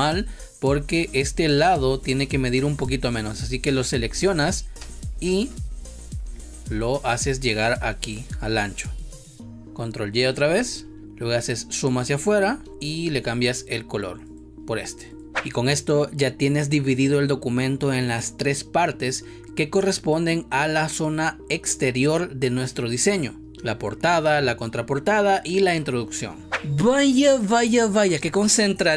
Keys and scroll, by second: 4.7 space, 10.3 ctrl+y, 12.6 space.